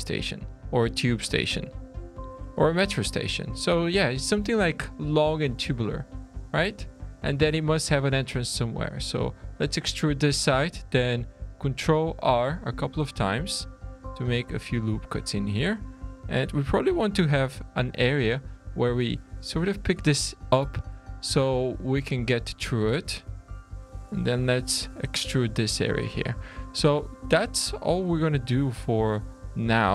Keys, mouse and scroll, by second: 0.3-1.0 scroll up 2, 1.0-1.5 scroll down 2, 1.5 shift+middle click, 2.4 middle click, 3.0-3.5 scroll up 2, 3.5-3.9 scroll down 3, 6.5 middle click, 7.7-8.6 scroll up 1, 8.6 click, 10.9 ctrl+r, 13.0 alt+a, 13.5 2, 13.9 click, 14.4 3, 14.6 click, 15.8 alt+a, 16.6 2, 17.1 click, 18.0 click, 19.7 scroll down 2, 20.1 shift+middle click, 22.8 alt+a, 23.0 2, 23.5 alt+click, 24.5 e, 25.9 scroll down 2, 26.0 Tab, 26.4 shift+middle click, 27.0 Tab, 27.3 scroll up 3, 27.6 alt+a, 27.7 scroll down 1, 27.9 3, 28.1 click, 29.0 click, 29.8 Tab.